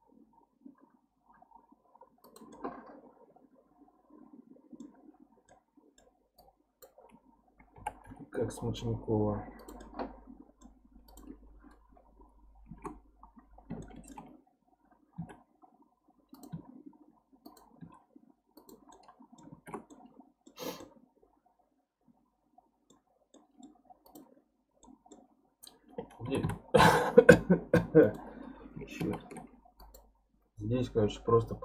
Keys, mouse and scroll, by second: 2.5-6.4 middle drag, 6.4 click, 7.7 g, 9.8-11.1 middle drag, 11.1 click, 11.9 KP_3, 12.7 alt+z, 13.4 scroll up 4, 13.8-15.2 shift+middle drag, 15.2 e, 16.5 e, 18.9 middle click, 19.5 alt+z, 19.9 middle click, 20.6 scroll down 2, 20.8-24.0 middle drag, 24.0 click, 24.4 scroll up 2, 24.8-26.3 middle drag, 26.3 e, 29.0 ctrl+z, 29.8 click.